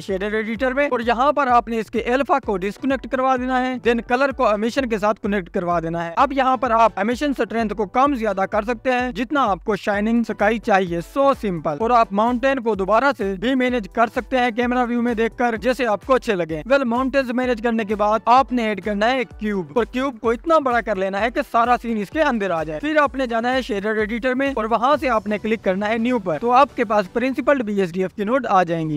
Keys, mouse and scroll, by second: 1.7-4.0 drag, 1.7-2.1 scroll up 3, 4.0-4.4 scroll down 1, 6.8-11.3 drag, 11.3 scroll down 8, 12.1 click, 13.2-14.4 scroll down 1, 14.4 ctrl+s, 15.3 click, 17.5 click, 17.9 click, 18.5 s, 19.2 click, 19.7 click, 20.5-20.9 scroll down 3, 20.9 click, 21.2 s, 23.2 s, 23.8 click, 24.8-26.2 drag, 26.2 scroll up 4, 28.2 click.